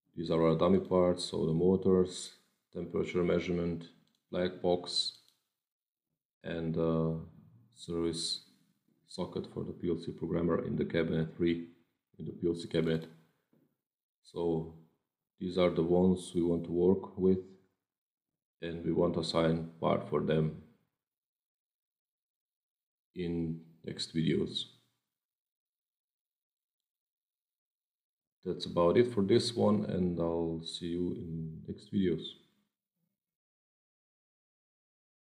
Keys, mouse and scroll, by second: 0.6 click, 2.0 click, 3.9 click, 5.1 click, 12.7 click, 26.6 click, 32.6 click.